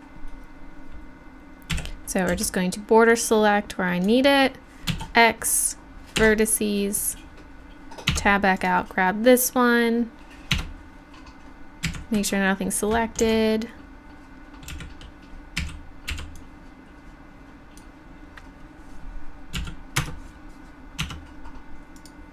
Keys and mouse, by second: 1.8 a, 2.3 b, 4.9 x, 8.1 Tab, 8.6 right click, 10.7 Tab, 11.9 a, 13.3 v, 14.7 a, 15.6 a, 16.1 b, 19.6 x, 21.0 Tab, 22.0 right click.